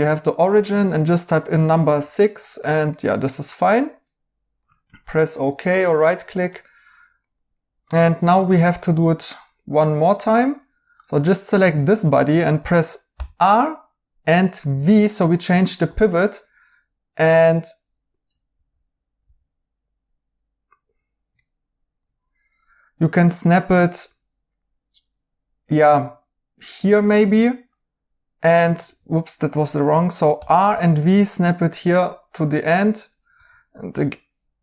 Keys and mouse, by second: 1.8 6, 2.9 right click, 5.3 right click, 7.2 right click, 15.8 v, 18.4 alt+z, 19.2 alt+z, 21.3 right click, 28.8 ctrl+z, 30.3 r, 32.9-33.6 typing.